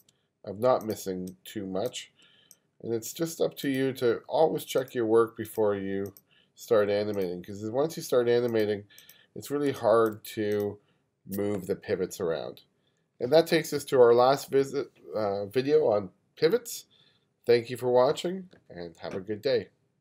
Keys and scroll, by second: 1.3 space, 2.3 space, 9.7 space.